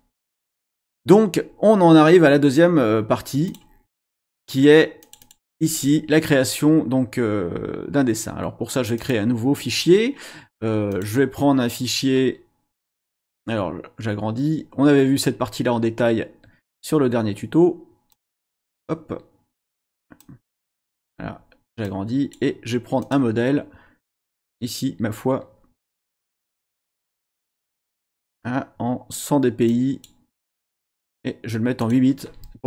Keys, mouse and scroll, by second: 3.4 click, 5.0 click, 9.0 click, 10.9 click, 18.1-18.8 drag, 19.6 click, 20.2 click, 21.8-22.5 drag, 23.0 click, 23.7-24.0 scroll down 1, 26.9 click, 29.7 click, 30.9 click, 31.8 click.